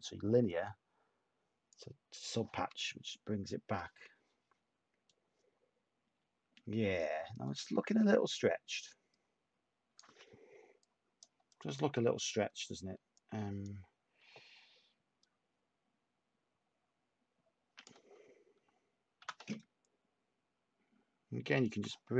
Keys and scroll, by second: 19.3 t.